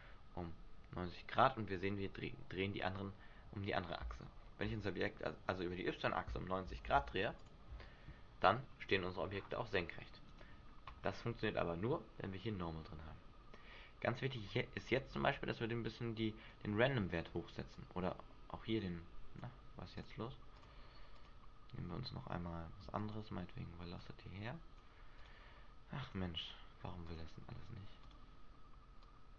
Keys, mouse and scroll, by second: 2.9 right click, 4.0 r, 7.4 click, 8.7-9.1 scroll down 3, 9.3-10.3 scroll up 5, 10.3 right click, 11.9-12.3 scroll up 2, 15.1 click, 17.7 click, 20.0 click, 20.5 click, 24.0 click, 25.2 click, 27.0 click, 29.0 click.